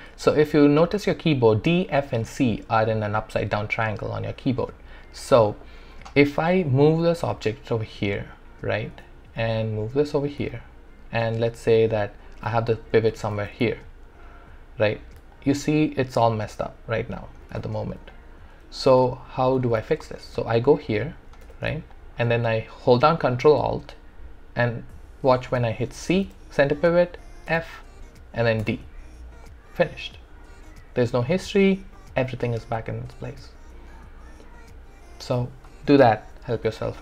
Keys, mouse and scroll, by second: 5.4-8.9 drag, 5.4 typing, 8.9 e, 9.6-11.6 drag, 11.6-13.4 typing, 12.0 middle click, 13.7-15.3 alt+drag, 17.5 e, 18.1 click, 19.4 alt+click, 20.0 alt+middle click, 20.7 alt+click, 21.4 w, 21.9 alt+click, 26.3 ctrl+alt+c, 27.5 ctrl+alt+f, 28.6 ctrl+alt+d.